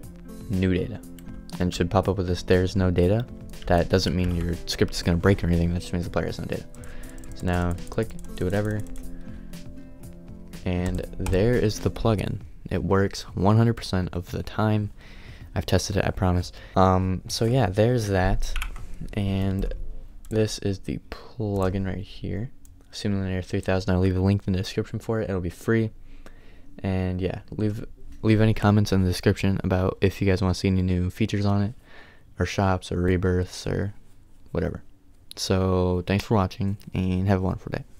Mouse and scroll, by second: 0.0-3.7 drag.